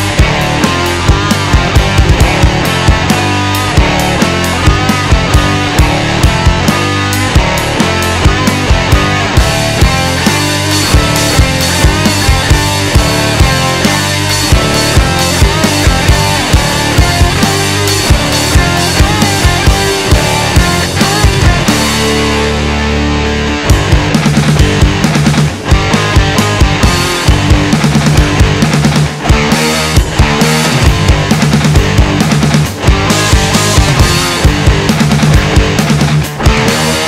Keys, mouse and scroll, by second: 0.5 middle click, 0.9 KP_1, 1.1 scroll down 2, 2.1 e, 4.0 middle click, 4.7 KP_1, 5.5 click, 10.8-13.0 middle drag, 13.0 KP_1, 13.4-13.7 scroll down 2, 13.7 middle click, 14.4 KP_1, 14.8-15.9 scroll down 2, 15.9 shift+scroll up 1, 16.0 shift+middle click, 16.5 scroll up 1, 16.6 middle click, 17.3 KP_3, 17.7 shift+middle click, 18.3-19.1 scroll up 1, 19.1 alt+z, 19.7 click, 21.6 ctrl+click, 22.9 click, 25.1 KP_1, 25.6-26.0 scroll up 1, 26.0-27.1 middle drag, 27.1-27.6 scroll down 2, 27.6 KP_4, 28.2 KP_1, 29.0 KP_3, 29.8 click, 32.4 click, 33.6 click, 34.5 click, 36.5 click.